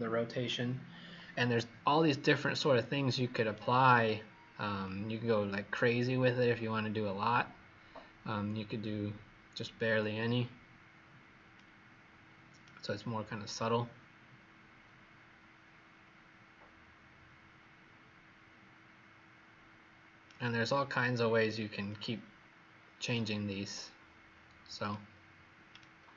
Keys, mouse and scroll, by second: 4.9 click, 12.5 right click, 21.8 click, 25.7 shift+right click.